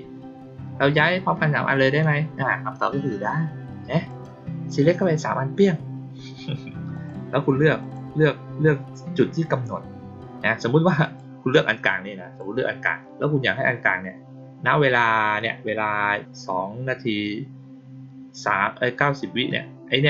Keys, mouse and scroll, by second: 4.0 click, 6.9 click, 7.7 click, 10.9 click, 11.8 click.